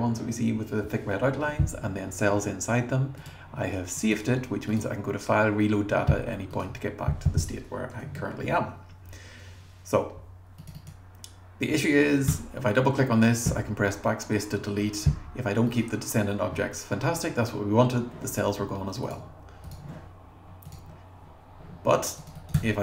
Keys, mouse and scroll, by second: 10.6 click, 10.8 click, 12.3 BackSpace, 15.7 click, 20.7 click, 22.2 click, 22.4 click, 22.5 BackSpace.